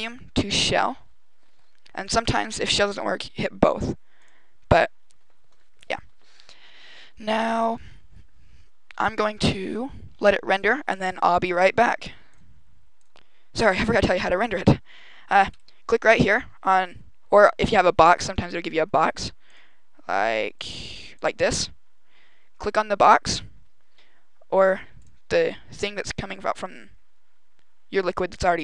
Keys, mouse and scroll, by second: 1.9 click, 4.0 click, 13.8 click, 15.3 right click, 19.4 click, 20.1 click, 20.5 click, 24.9 click.